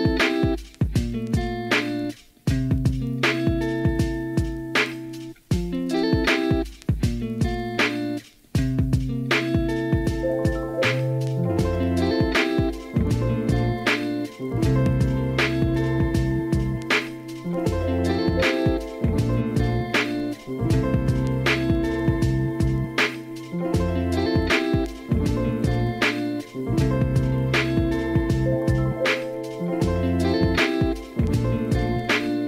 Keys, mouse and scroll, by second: 0.5 g, 2.8 g, 3.7 shift+middle click, 6.8 middle click, 7.6 shift+click, 8.4 KP_1, 8.8 alt+z, 10.7 shift+middle click, 11.7 g, 13.6-14.7 drag, 14.7 g, 15.9 click, 16.7 middle click, 17.6 middle click, 18.7 KP_3, 19.5 click, 20.8 ctrl+z, 20.9 click, 21.2 click, 21.7 click, 22.5-24.2 drag, 25.7 shift+middle click, 27.7-31.0 drag, 31.4 shift+click.